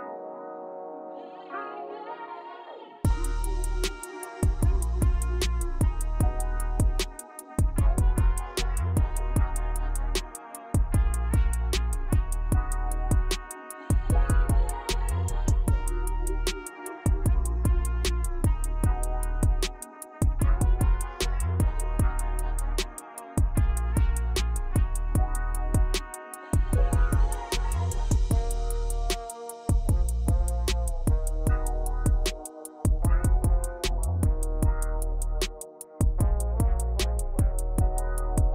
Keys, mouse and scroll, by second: 1.5 t, 3.3 r, 7.2-8.2 shift+middle drag, 8.2-9.8 drag, 10.0-10.6 scroll up 9, 10.6-12.2 shift+middle drag, 12.2-12.6 scroll up 2, 12.6-14.2 shift+middle drag, 14.2-15.6 scroll up 1, 16.7-18.4 drag, 19.1 scroll down 4, 19.3-20.7 shift+middle drag, 20.7 shift+a, 23.0 click, 24.6-26.2 shift+drag, 27.5 scroll down 2, 27.7-28.8 middle drag, 28.8 scroll down 2, 32.1 s.